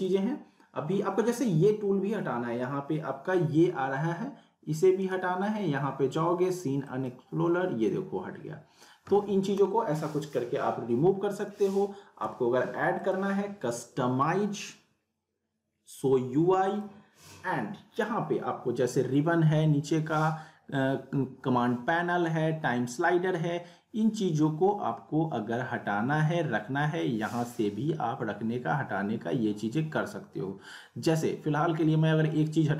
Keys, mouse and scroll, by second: 5.0 right click, 6.8 click, 13.0 click, 16.7 click.